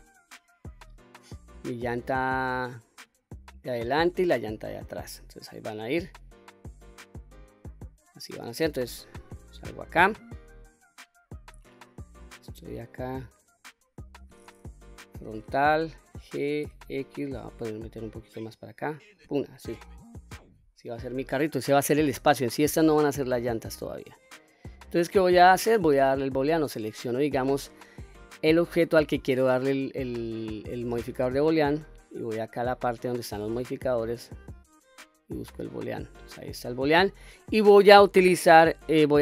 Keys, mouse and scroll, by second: 8.9 Tab, 9.5-10.0 middle drag, 10.7 click, 11.9 scroll down 2, 12.4-14.2 middle drag, 14.7 KP_1, 16.0 g, 16.6 x, 19.0 click, 19.5-20.9 middle drag, 20.9 scroll down 1, 21.3 scroll up 1, 23.5-23.9 scroll down 1, 24.1-24.5 middle drag, 24.8-25.4 scroll up 1, 25.4-26.2 middle drag, 26.7 click, 33.4 click, 34.3-35.8 drag.